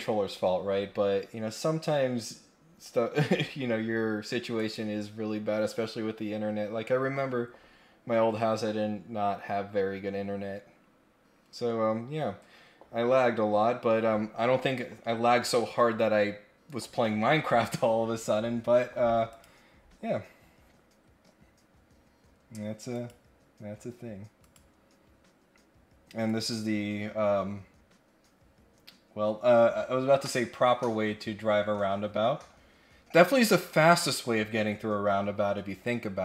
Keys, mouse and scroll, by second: 4.5 click, 19.3 click, 20.5 scroll down 1, 22.9 click, 24.3 click, 26.3 click, 33.5 click.